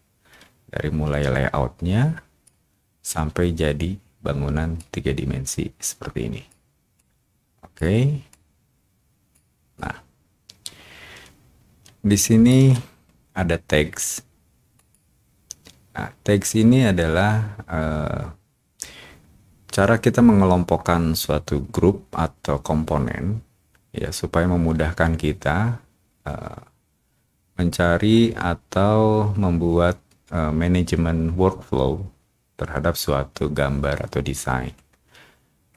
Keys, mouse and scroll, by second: 4.7-6.4 drag, 6.9 click, 8.3-9.3 drag, 9.7-11.2 drag, 11.5 shift+click, 11.8 shift+click, 14.7 click.